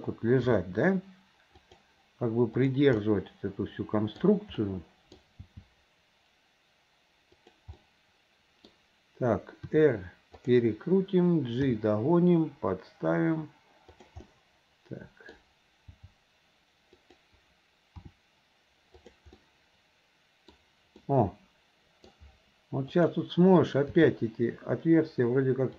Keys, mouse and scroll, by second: 0.5 g, 2.6 click, 3.1-4.2 middle drag, 4.7 middle click, 6.2 g, 7.8-9.1 middle drag, 10.4 r, 12.6 g, 14.3-15.5 middle drag, 16.6 g, 19.3 r, 19.4-20.8 middle drag, 21.1-22.2 middle drag, 22.9 click, 24.9 g.